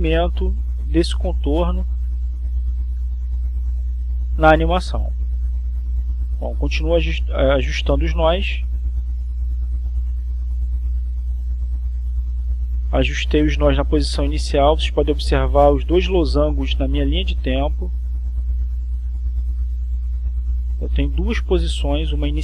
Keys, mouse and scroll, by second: 0.7 click, 2.2 click, 3.9-6.1 drag, 6.5 click, 7.1 click, 8.7 click, 9.9-10.9 drag, 11.9 click, 12.9-15.3 drag, 16.5-18.9 drag, 18.9-20.5 drag.